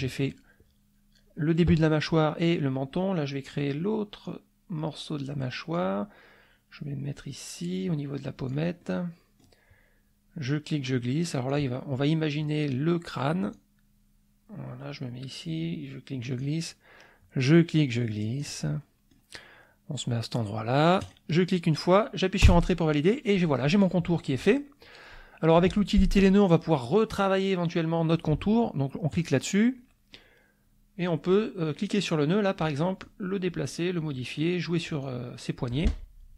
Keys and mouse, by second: 4.2-5.9 drag, 7.2-8.7 drag, 8.8 middle click, 10.4-11.7 drag, 12.1 middle click, 13.5-16.6 drag, 17.4-19.3 drag, 21.0 click, 22.4 Return, 29.1 click, 29.7 middle click, 31.8 click, 33.0-34.5 drag, 35.0 click.